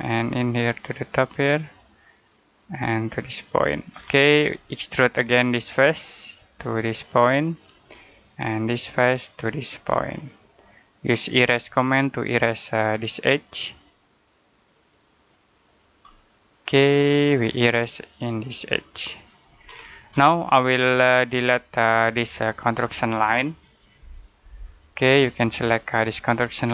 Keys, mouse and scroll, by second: 3.7-5.0 scroll down 1, 5.0 click, 15.9 middle click, 17.7 click, 19.5-19.8 scroll down 1, 21.4 click, 24.2 Delete, 25.1 click.